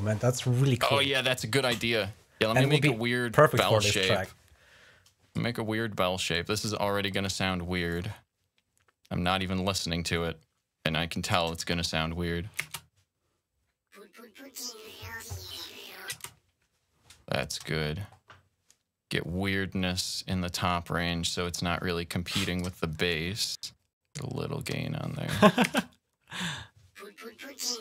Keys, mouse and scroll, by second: 1.8 click, 2.8-3.7 scroll up 2, 3.7 click, 4.5 click, 6.2 click, 9.6-11.3 drag, 12.5 space, 16.0 space, 17.3 click, 18.2 click, 21.1-22.5 drag, 23.4-24.5 drag, 25.6 space.